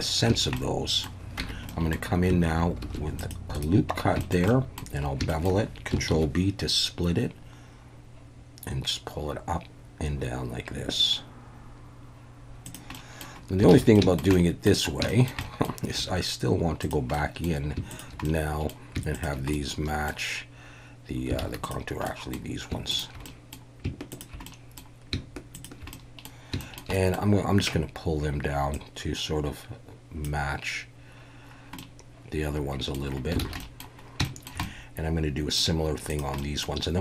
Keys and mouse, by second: 0.5-1.0 middle drag, 1.4 Tab, 1.7 middle click, 2.8 ctrl+r, 3.5 right click, 4.2 shift+middle click, 4.5 middle click, 5.3 shift+middle click, 6.1 ctrl+b, 12.6 click, 12.9 middle drag, 13.7 alt+a, 13.9 shift+middle drag, 14.3-14.7 middle drag, 15.1 shift+middle drag, 15.4 middle click, 16.0 1, 17.1 middle click, 18.2 middle click, 19.2 shift+click, 19.5-20.1 middle drag, 21.4 alt+a, 21.7 click, 22.0 middle click, 23.2 middle click, 24.1 shift+click, 24.4 middle click, 25.9 middle click, 26.6 shift+middle click, 26.9 middle click, 28.8-30.2 drag, 31.8-32.9 middle drag, 33.4 alt+a, 33.6 middle click, 34.2 shift+click, 34.6 click, 36.4 click.